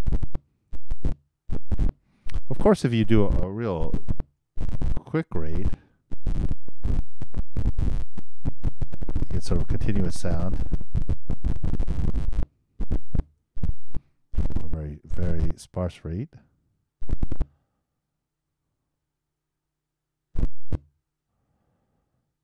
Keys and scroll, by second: 5.4 super+4, 6.3 super+Return, 11.6 super+i, 11.7 super+Return, 14.7 super+0, 15.4 super+Return.